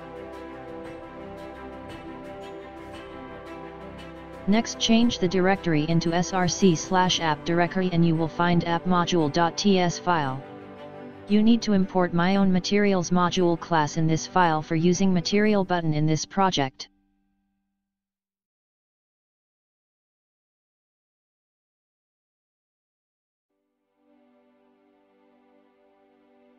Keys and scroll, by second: 0.9 ctrl+c, 14.6 typing.